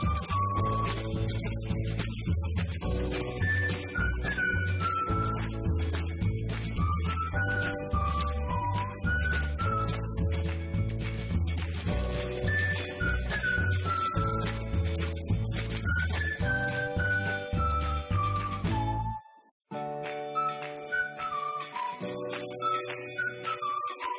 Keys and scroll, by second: 0.0-0.8 typing, 2.5 BackSpace, 13.8-16.4 typing.